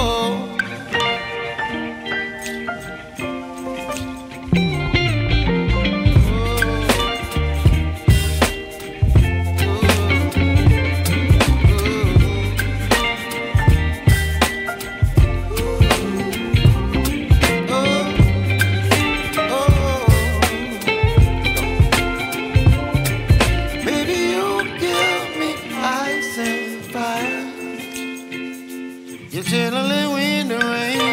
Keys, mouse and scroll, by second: 1.3 click, 2.4 middle click, 4.4 click, 4.8 shift+a, 10.9 middle click, 13.3 click, 14.0 click, 14.7 click, 15.7 h, 16.6 click, 18.5 click, 20.8-22.0 drag, 23.1 click, 24.5 click, 26.5 click, 27.6 click, 28.1 shift+a, 30.1 shift+a.